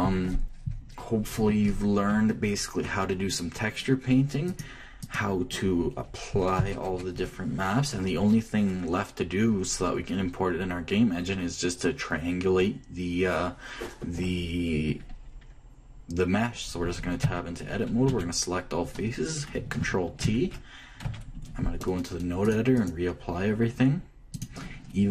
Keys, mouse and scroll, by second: 0.4-2.2 middle drag, 5.2-7.1 drag, 11.5-16.1 middle drag, 17.9 Tab, 18.8 a, 20.3 Left, 21.7 Tab, 23.1-25.1 drag.